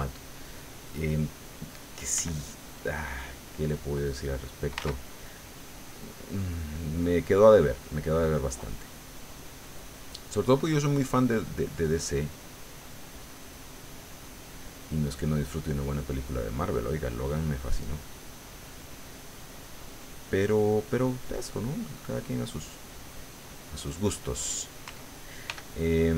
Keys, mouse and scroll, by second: 0.5 click, 2.2 f, 2.6 click, 3.5-4.8 drag, 4.8 ctrl+z, 7.9-9.3 middle drag, 9.3-10.4 scroll up 1, 11.6-12.7 drag, 13.0 click, 14.0 click, 14.7 click, 15.4 middle click, 16.9 click, 18.0 click, 18.8 click, 21.0 middle click, 21.8 middle click, 23.1 click, 23.8 click, 25.4 f.